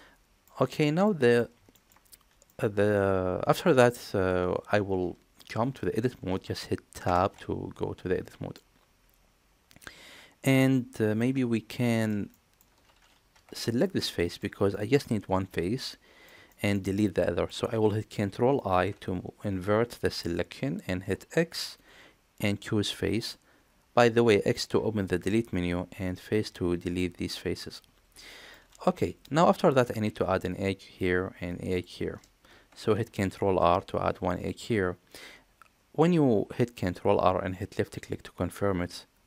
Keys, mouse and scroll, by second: 1.1 middle click, 1.7 shift+middle click, 2.5-3.7 middle drag, 7.0 Tab, 8.6-11.2 middle drag, 11.9 shift+middle click, 12.3 middle click, 13.3 3, 13.7 click, 14.2 shift+middle click, 14.7-16.3 middle drag, 16.5 shift+middle click, 17.0 middle click, 18.7 ctrl+i, 20.1 middle click, 21.5 x, 27.0-28.5 middle drag, 29.0 shift+middle click, 33.4 ctrl+r, 37.1 middle click.